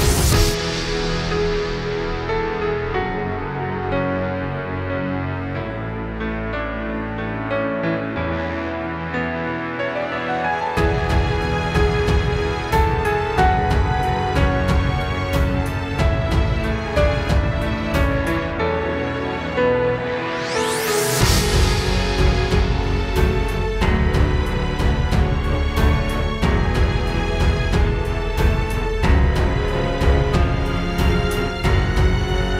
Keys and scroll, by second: 0.3 super+], 2.1 super+z, 5.7 super+", 6.0 space, 6.8 alt+super+space, 7.3 space, 8.3 space, 8.5 space, 8.7 space, 15.8 space, 16.3 space, 16.7 space, 18.1 super+space, 18.4 super+space, 27.2 super+", 27.8 space, 28.2 space, 31.2 space, 31.4 space.